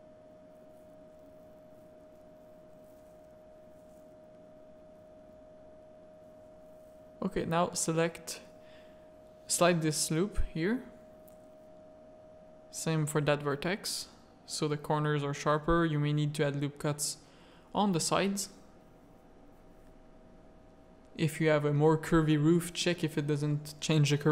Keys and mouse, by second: 0.5 alt+click, 1.0 g, 3.3 Tab, 3.8 middle click, 4.3 z, 4.9 click, 5.1 middle click, 5.5 Tab, 5.6 middle click, 6.8 alt+click, 7.1 middle click, 7.5 g, 10.5 click, 10.6 z, 10.9 a, 11.4 click, 12.0 z, 12.4 g, 14.1 ctrl+r, 15.9 ctrl+r, 18.9 middle click, 19.7 ctrl+r.